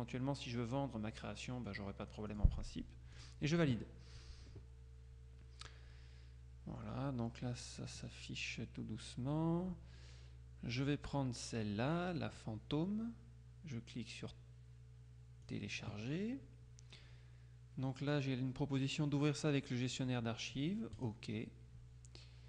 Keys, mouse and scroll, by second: 1.7 click, 3.2 click, 7.7-8.7 scroll down 3, 15.5 click, 21.1 click.